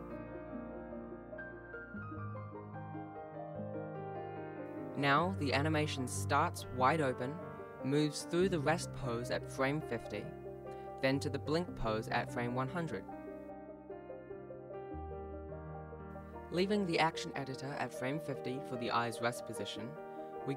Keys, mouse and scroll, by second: 0.6 alt+s, 1.2 i, 1.7 s, 3.6 s, 4.8 i, 7.4 click, 11.7 t, 13.4 click, 16.4 click, 17.1 ctrl+s, 17.2 ctrl+s, 17.4 alt+a, 17.9 ctrl+s, 19.0 alt+a, 19.5 Tab, 19.5 alt+a, 20.0 click.